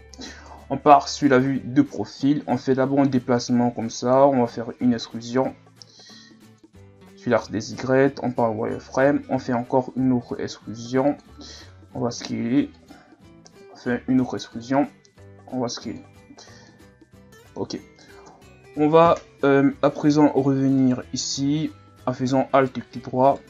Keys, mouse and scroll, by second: 0.5 KP_3, 1.4-2.2 scroll up 4, 2.2-2.7 scroll up 2, 2.7-4.4 drag, 4.4-4.8 scroll up 1, 4.8 e, 6.8-7.2 scroll down 2, 7.2-8.0 scroll up 6, 8.1 z, 8.6-8.9 ctrl+scroll up 1, 9.4 e, 11.6 s, 13.3 e, 15.2 s, 16.1 z, 16.4-16.7 scroll down 1, 16.7-18.3 middle drag, 18.3 KP_1, 19.2-19.6 scroll up 2, 20.8 alt+right click, 22.3 scroll up 1, 22.5 right click, 23.2 right click.